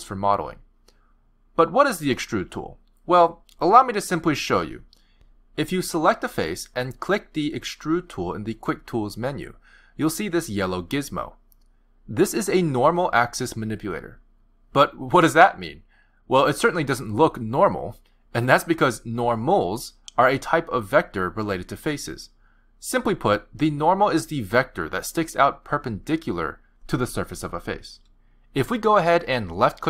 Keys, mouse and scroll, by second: 4.2 click, 5.4 click, 6.9 click, 9.0 click, 22.4 click, 23.4 click, 24.4 click, 25.2 click, 27.1 click.